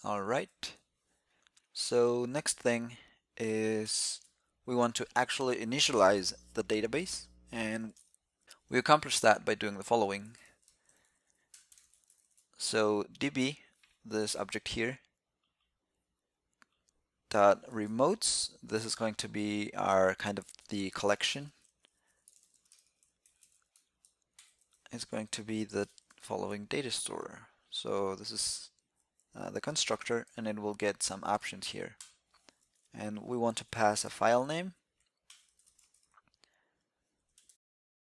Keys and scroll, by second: 29.0 alt+c, 30.4 alt+c.